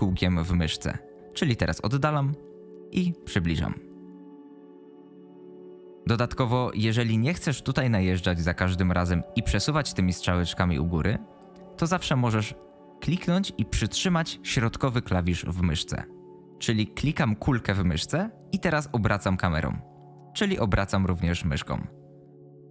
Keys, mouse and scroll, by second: 8.1-11.4 drag, 17.7-22.7 middle drag.